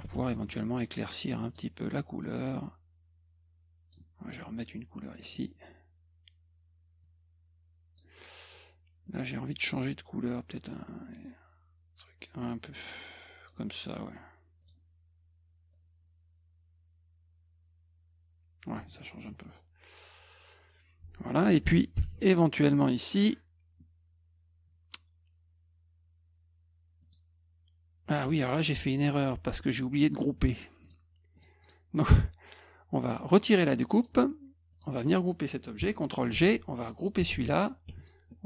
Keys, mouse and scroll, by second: 0.1 ctrl+shift+f, 1.5 click, 2.6-3.9 drag, 5.2 click, 5.4 click, 7.0 click, 9.1 click, 10.8 click, 14.6 click, 15.7 click, 19.3 F1, 19.5 click, 22.0 ctrl+shift+l, 27.0 click, 30.8 click, 31.4 click, 31.6 right click, 33.3 click, 34.0 click, 34.7 click, 36.3 ctrl+g, 36.8 click, 37.3 ctrl+g, 38.0 shift+click.